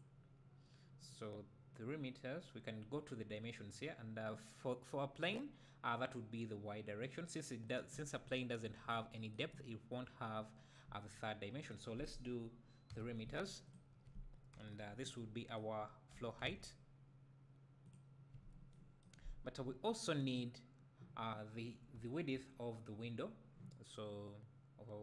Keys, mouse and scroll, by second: 0.8-5.4 middle drag, 0.8-3.9 scroll up 2, 3.9-5.4 scroll up 1, 7.0-8.2 drag, 8.2 `, 8.8 scroll up 2, 11.6-13.7 drag, 14.5 KP_1, 16.1 g, 17.9 drag, 19.3-19.6 scroll up 2, 22.0 `.